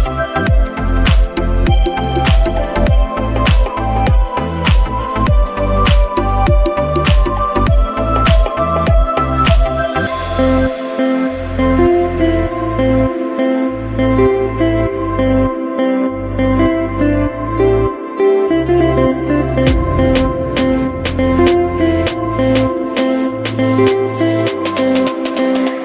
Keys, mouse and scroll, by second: 0.2 scroll down 2, 0.7 scroll down 3, 1.4 middle click, 2.2 scroll down 1, 2.6 click, 3.4 scroll down 2, 4.0 click, 4.0 scroll down 5, 7.5-8.4 scroll down 7, 7.8 click, 8.8 middle click, 9.4-10.2 scroll up 10, 10.7 scroll down 6, 11.0 middle click, 11.9 scroll down 1, 12.1 middle click, 12.6 scroll up 5, 13.1-13.7 scroll down 6, 13.7 click, 15.6-16.1 scroll up 8, 16.3 middle click, 17.0 scroll up 1, 17.9 scroll down 1, 18.5 click, 23.0 right click.